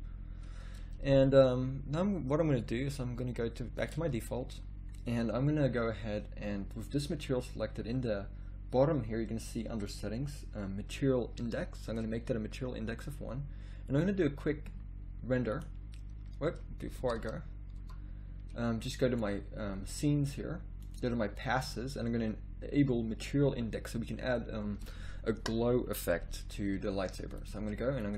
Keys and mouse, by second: 8.3-11.8 middle drag, 11.8-15.7 drag, 17.7 Escape, 21.0-26.4 drag, 27.3 click.